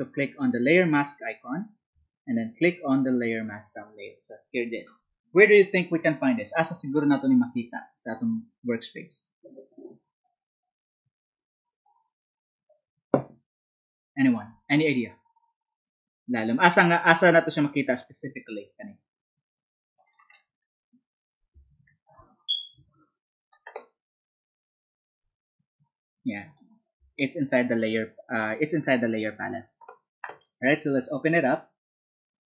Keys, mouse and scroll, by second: 21.7 alt+Tab, 23.1 alt+Tab.